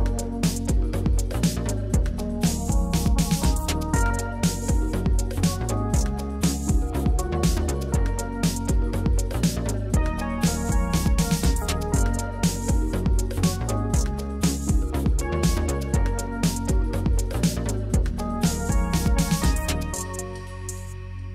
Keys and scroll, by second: 0.0-1.5 typing, 8.1-8.9 typing, 10.1 shift+Down, 10.2 shift+Up, 11.4 ctrl+d, 20.7-21.3 typing.